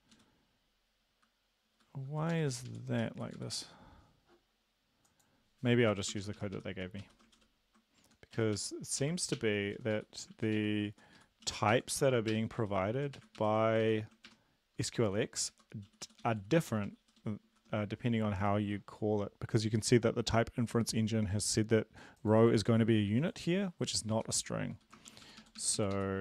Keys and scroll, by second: 0.1 Up, 0.1 Down, 1.7 Up, 2.5 Up, 2.7 Up, 2.9 Down, 3.4 Up, 3.5 Up, 5.9 Down, 6.2 shift+Up, 6.4 shift+Up, 6.6 shift+Up, 6.8 shift+Up, 7.0 shift+Right, 7.4 ctrl+/, 8.0 Left, 8.4 Right, 9.0 ctrl+Left, 9.4 BackSpace, 9.8 Down, 10.0 Down, 10.3 ctrl+Right, 10.6 ctrl+Right, 11.0 Up, 11.2 Left, 11.5 Down, 11.7 ctrl+Left, 12.0 ctrl+Left, 12.3 BackSpace, 12.6 Down, 13.2 shift+Right, 13.8 ctrl+shift+Left, 14.3 BackSpace, 15.5 Right, 15.9 Down, 16.1 Down, 16.3 Down, 16.4 Down, 16.6 Down, 16.9 Down, 17.2 Down, 24.1 Down, 24.8 End, 25.1 shift+Up, 25.3 shift+Up, 25.4 shift+Up, 25.6 shift+Up, 25.8 shift+Up, 26.0 shift+Up.